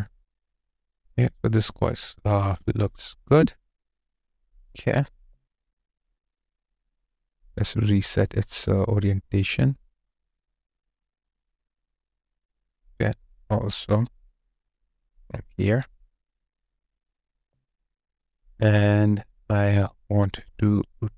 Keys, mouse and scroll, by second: 3.1 ctrl+z, 5.2 alt+click, 10.8 double click, 14.8 double click, 17.3 alt+click.